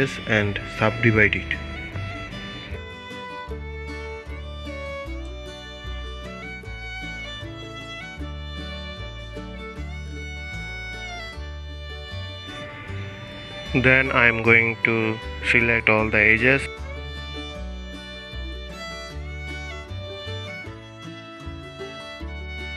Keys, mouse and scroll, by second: 0.3 shift+click, 1.0 shift+click, 1.7-7.3 right drag, 7.3-11.1 drag, 12.2 alt+click, 14.1 alt+shift+click, 15.3 alt+shift+click, 16.4 alt+shift+click, 17.7 alt+shift+click, 18.4 alt+shift+click, 19.8 alt+shift+click, 21.4 alt+shift+click.